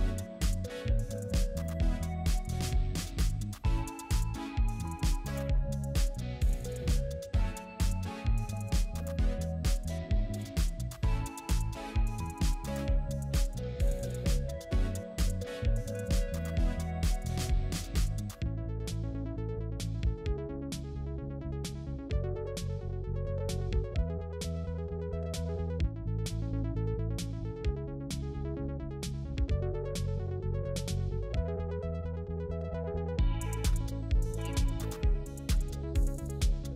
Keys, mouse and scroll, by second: 1.4-2.1 typing, 4.3-4.6 scroll down 1, 4.6-5.0 scroll up 1, 8.1 right click, 12.1 ctrl+click, 17.2-18.0 typing, 19.8-20.6 typing, 24.5-25.3 typing, 25.4 right click, 32.3-33.8 typing, 33.4-33.7 scroll up 1, 35.6 typing.